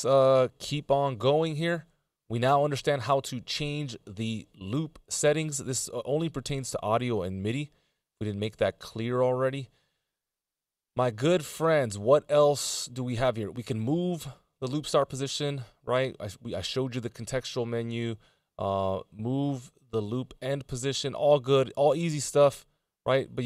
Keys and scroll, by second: 1.2 Return.